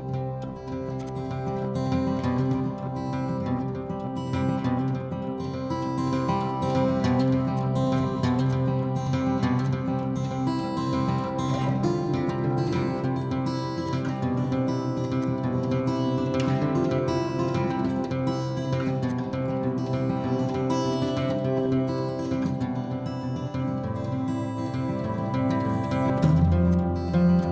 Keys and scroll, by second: 0.0-0.1 typing, 0.6 Escape, 1.8 typing.